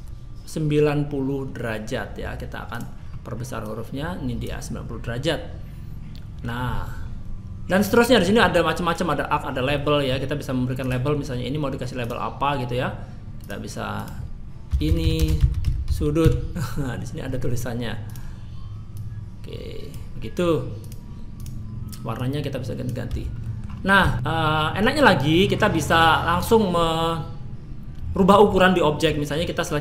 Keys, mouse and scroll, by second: 2.7 click, 3.0-3.6 scroll down 2, 3.6 click, 5.1 middle click, 7.0 scroll down 1, 8.2 middle click, 9.7 middle click, 10.8 click, 12.0 click, 13.4 click, 13.9 click, 18.0 click, 18.9 click, 20.8 click, 21.4 click, 23.1 a, 23.4 middle click, 23.7 scroll up 2, 24.1 shift+middle click, 24.1 middle click, 24.1 scroll down 2, 25.3 middle click, 26.4 click, 28.3 middle click, 29.1 middle click.